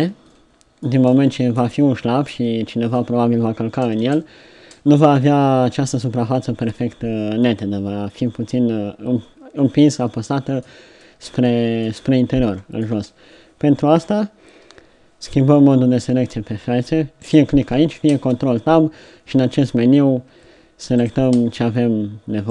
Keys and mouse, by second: 2.4-4.0 middle drag, 4.0 Tab, 4.6 Tab, 13.0 Tab, 18.2 ctrl+Tab, 21.4 ctrl+Tab.